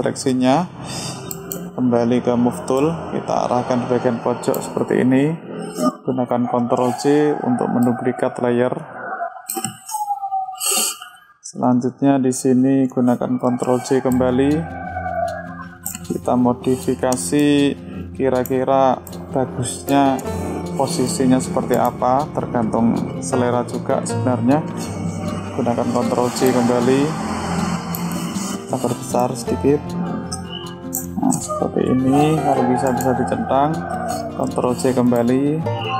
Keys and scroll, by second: 6.9 ctrl+j, 13.7 ctrl+j, 25.6 ctrl+j, 34.6 ctrl+j.